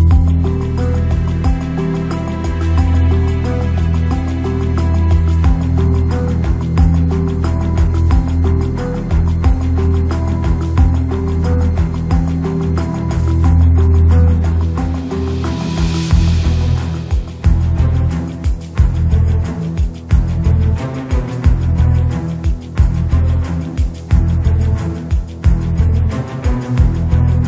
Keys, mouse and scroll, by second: 0.6 s, 2.2 s, 3.3 g, 5.7-6.9 drag, 7.8 click, 8.1 click, 9.0 click, 12.0 click, 12.7 g, 13.5 click, 13.9 click, 14.3 g, 16.0 middle click, 17.0 click, 19.5 click, 20.5 middle click, 21.7-23.0 middle drag, 23.1 KP_0, 23.7 shift+click, 24.7 middle click, 25.6 click, 26.0 click.